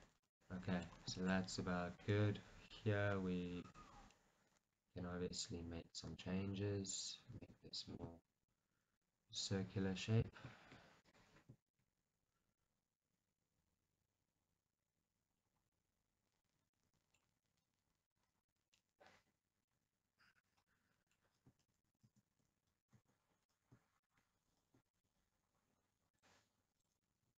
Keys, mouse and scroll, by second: 0.0 click, 0.2 scroll, 0.5-3.7 middle drag, 3.7 click, 4.2-7.5 middle drag, 6.3 g, 7.5-10.3 right drag, 10.3-12.0 drag, 12.7-18.7 middle drag, 17.4 g, 18.7 click, 18.9 middle click, 19.8 g, 20.6 click, 20.9-24.1 middle drag, 21.9 ctrl+z, 24.1 shift+click, 26.2-27.3 drag.